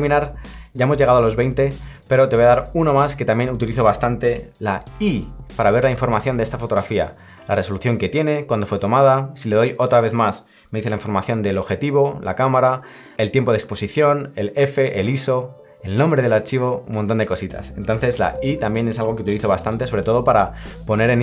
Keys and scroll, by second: 4.9 i.